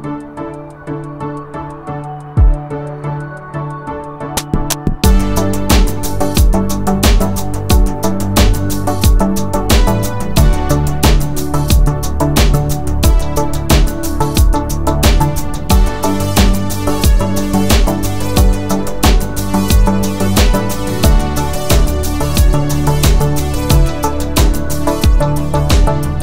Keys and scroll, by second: 0.0 Escape, 0.5 s, 2.6 space, 4.4 Escape, 4.4 typing, 6.1-7.3 typing, 8.3 Return, 9.3 m, 10.0 space, 11.4-12.1 typing, 13.3 space, 15.8 Escape, 16.1-17.8 typing, 20.6 Escape, 24.2 space.